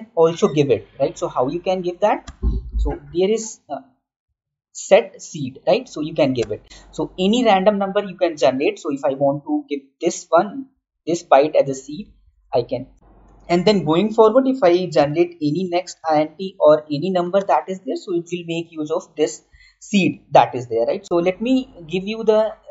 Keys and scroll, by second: 10.7 ctrl+c, 12.2 ctrl+v, 12.9 ctrl+z, 17.0 Down.